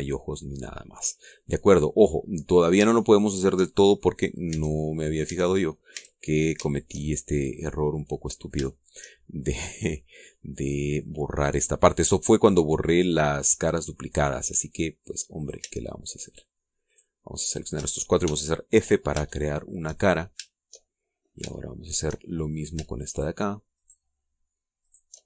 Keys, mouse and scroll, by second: 1.3 middle click, 3.2-3.8 scroll up 2, 4.2 shift+click, 4.4 shift+middle click, 5.1 middle click, 5.5 Tab, 5.9-6.2 scroll up 1, 6.2 Tab, 6.5 middle click, 6.6 click, 6.8 middle click, 6.9 click, 6.9 a, 7.4 scroll down 1, 7.7 shift+middle click, 8.4 middle click, 9.4-9.7 scroll up 1, 9.7 shift+middle click, 11.0-13.2 middle drag, 13.5 scroll down 1, 14.1 middle click, 16.4 shift+right click, 16.7 shift+middle click, 17.3 shift+right click, 17.9 shift+right click, 18.5 shift+right click, 19.2 f, 19.6-21.0 drag, 21.2 shift+scroll up 1, 21.8 shift+middle click, 23.6 shift+right click, 24.1 shift+right click, 24.8 shift+right click.